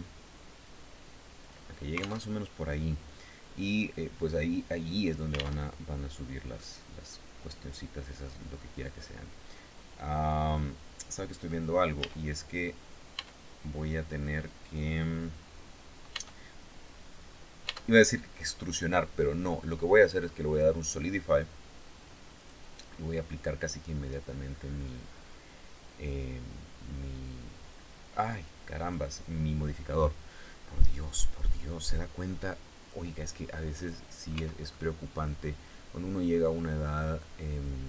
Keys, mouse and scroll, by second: 1.0 click, 1.8 alt+Tab, 5.2 alt+Tab, 6.1-10.2 drag, 11.6 a, 12.7 Tab, 15.7 Tab, 17.2 Tab, 19.2 click, 20.0 click, 22.0 click, 23.8-28.6 drag, 32.4 click, 33.3 middle click, 33.9 Tab, 34.2-37.8 middle drag.